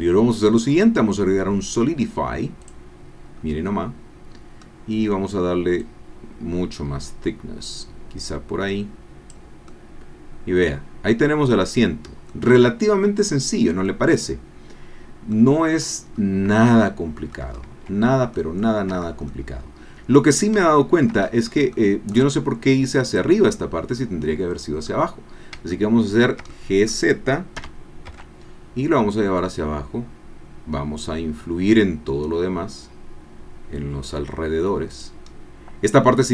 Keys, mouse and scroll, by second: 2.6 click, 3.3 scroll down 1, 4.3-4.9 scroll up 2, 5.8-9.5 drag, 9.7-12.4 drag, 12.4-13.9 middle drag, 13.9-15.4 drag, 16.1-16.5 scroll up 1, 16.9 shift+click, 17.5 shift+middle click, 17.6 shift+click, 18.6 scroll up 1, 18.8 middle click, 19.0 Tab, 19.8 click, 20.7 shift+click, 21.2-21.6 shift+scroll up 1, 21.7 shift+click, 23.3 click, 24.9 click, 25.7 shift+click, 26.5 shift+click, 27.6 g, 28.1 z, 29.5-30.1 scroll down 2, 30.2 middle click, 30.4-30.9 scroll down 1, 30.9 middle click, 32.2-32.6 scroll down 1, 34.9 click, 35.3-35.9 scroll down 2.